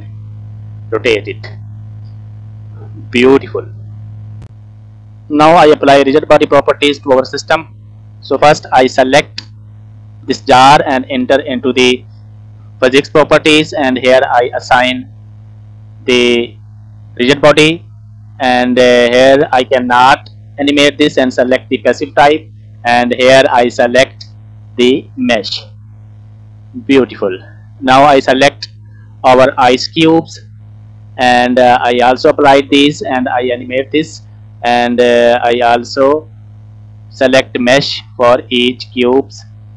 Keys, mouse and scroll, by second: 0.9 scroll down 2, 1.0 middle click, 1.7-2.7 scroll up 3, 2.7 middle click, 2.7 scroll down 1, 3.9 shift+middle click, 4.3 scroll down 1, 4.4 middle click, 7.2-8.7 scroll up 1, 8.7 click, 11.1-13.6 drag, 14.1 click, 14.6 click, 15.1 click, 16.1 click, 19.1-21.6 drag, 22.9-25.2 drag, 26.8 shift+middle click, 27.4-28.1 scroll up 1, 28.1 click, 28.1 scroll up 1, 28.9 scroll down 1, 29.4 shift+middle click, 31.9 click, 35.1-37.2 drag, 38.1 click, 39.1 click.